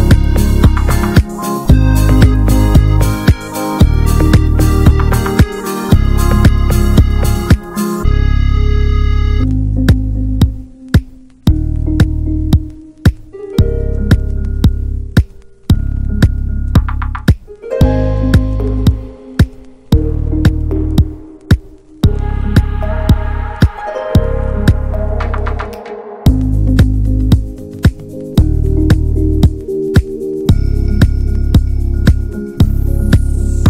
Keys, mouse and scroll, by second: 0.5 shift+f, 2.1-3.3 drag, 3.3-3.8 scroll down 3, 3.8 ctrl+z, 4.0 scroll up 2, 4.6 Tab, 5.2 shift+h, 6.3 Tab, 7.0 click, 7.9 scroll up 1, 8.5 ctrl+z, 9.4 click, 10.4 ctrl+z, 10.7 shift+f, 12.2-14.2 drag, 14.4 ctrl+z, 14.9 shift+f, 17.1-18.3 drag, 18.3-19.8 middle drag, 19.8-21.1 drag, 21.1 scroll down 2, 21.5 middle click, 21.6-22.1 scroll up 1, 22.1 shift+middle click, 22.5 scroll up 1, 22.8 shift+middle click, 23.6 scroll up 1, 24.1-25.8 middle drag, 25.8 click, 26.5-27.2 scroll down 2, 27.2 middle click, 27.9 alt+h, 28.2-28.7 scroll down 1, 28.7-30.4 middle drag, 30.4 scroll up 1, 30.7 middle click, 31.4-31.7 scroll up 2, 31.7 middle click, 32.5 click, 33.3 scroll down 3, 33.5 middle click.